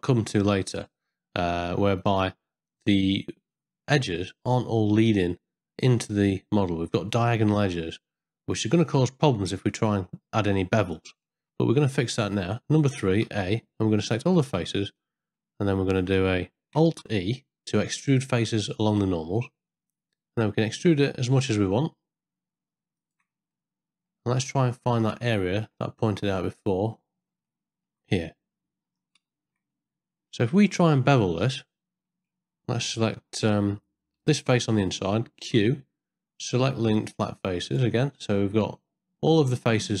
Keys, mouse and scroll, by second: 8.9-10.9 middle drag, 11.3 ctrl+middle click, 11.7 ctrl+middle click, 12.5 ctrl+middle click, 12.6 Tab, 12.9 3, 13.2 a, 14.0 ctrl+middle click, 14.3 ctrl+click, 15.0 click, 15.7 ctrl+click, 16.9 alt+e, 23.5 middle click, 24.7 ctrl+middle click, 25.2 shift+middle click, 26.4 middle click, 27.4 middle click, 28.2 ctrl+middle click, 29.3 shift+middle click, 29.8 ctrl+middle click, 30.5 middle click, 31.2 ctrl+middle click, 31.6 middle click, 35.4 q, 39.2-40.0 middle drag.